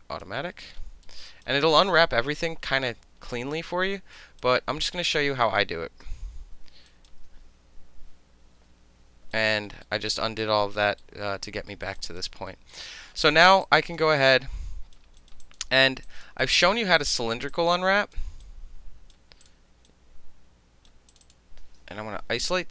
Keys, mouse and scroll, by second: 1.3 alt+right click, 1.7 alt+middle click, 2.0 alt+right click, 4.1 alt+right click, 4.7 ctrl+z, 5.1 ctrl+z, 5.6 ctrl+z, 6.0 ctrl+z, 6.9 alt+click, 7.1-8.3 alt+middle drag, 8.7 ctrl+y, 9.3 alt+right click, 9.5 alt+middle click, 9.8-10.8 alt+middle drag, 11.0 alt+middle click, 11.7 alt+middle click, 12.0 alt+click, 12.5 alt+middle click, 13.6 alt+click, 14.2 alt+right click, 15.2 alt+right click, 15.4 alt+click, 16.0 alt+click, 16.4 alt+right click, 16.6-17.0 alt+middle drag, 17.0 click, 17.0 middle click, 17.1 click, 17.2-17.5 alt+middle drag, 17.5-18.1 alt+drag, 18.1 alt+middle click, 18.4-19.1 right drag, 19.4 click, 19.9-20.9 right drag, 21.1 click, 21.2 click, 22.3 shift+i.